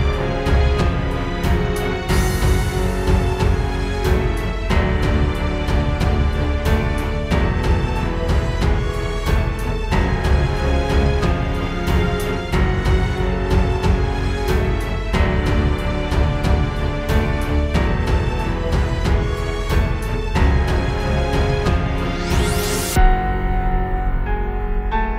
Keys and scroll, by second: 1.2 space, 1.8 super+space, 2.2 super+space, 6.3 super+z, 12.8 super+[, 13.9 super+[, 14.5 super+], 15.0 super+[, 22.4 space, 22.8 space.